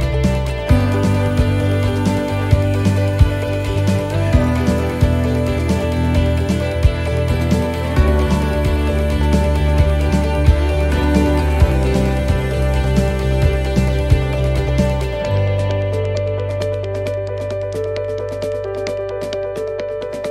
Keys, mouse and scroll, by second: 0.5 shift+middle click, 1.0 middle click, 1.0-1.8 scroll up 3, 1.8 middle click, 2.3 scroll down 1, 2.7 middle click, 4.0 click, 12.7 click, 18.6-19.0 scroll up 1.